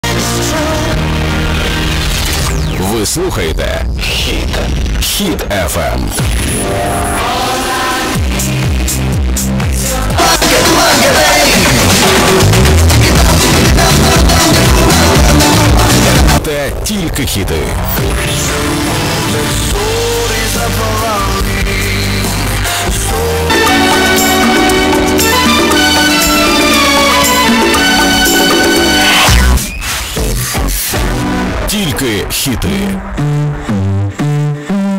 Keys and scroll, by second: 0.1 ctrl+q, 1.8 p, 2.1 Down, 2.3 Down, 2.5 Down, 3.4 Down, 4.0 Return, 17.1 Page_Down, 29.7 Page_Down.